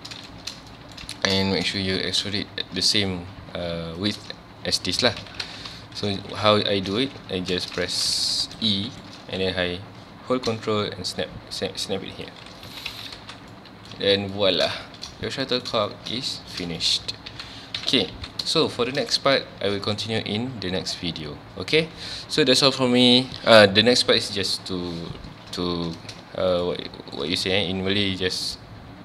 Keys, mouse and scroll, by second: 0.1 scroll up 1, 0.3-1.4 shift+middle drag, 1.4-1.7 scroll up 1, 1.7 shift+scroll down 1, 1.8-2.8 shift+middle drag, 2.8 e, 4.1 ctrl+click, 5.0 alt+a, 5.2 Tab, 5.4 alt+a, 5.5 scroll down 1, 5.8 middle click, 6.1 scroll up 1, 6.1 ctrl+z, 6.7 scroll up 1, 6.9 ctrl+z, 7.7 shift+middle click, 8.2 g, 8.6 right click, 8.7-9.2 shift+middle drag, 9.2 e, 12.2 ctrl+click, 12.7 alt+a, 12.9 Tab, 13.2 alt+a, 13.3 scroll down 1, 13.5-14.0 middle drag, 14.0 ctrl+s, 14.2 scroll down 1, 14.3 middle click, 15.2 scroll down 1, 15.4-17.3 middle drag, 17.3 ctrl+s, 17.8 KP_1, 18.1 ctrl+s, 18.7-21.8 shift+middle drag, 26.6-29.0 shift+middle drag.